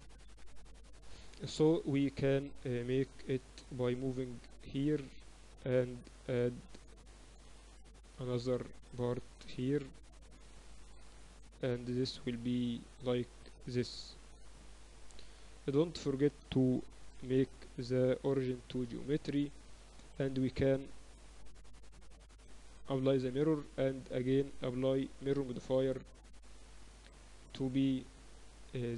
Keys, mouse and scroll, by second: 1.4 KP_1, 1.6 z, 2.3-4.5 middle drag, 4.5-6.5 drag, 6.5 ctrl+r, 7.3 a, 8.4 middle click, 8.4 b, 9.8-11.7 drag, 11.1 a, 11.8 b, 13.3-15.1 drag, 15.9 Tab, 15.9-18.6 middle drag, 18.0 ctrl+alt+shift+c, 21.1-23.6 drag, 23.7-26.8 drag.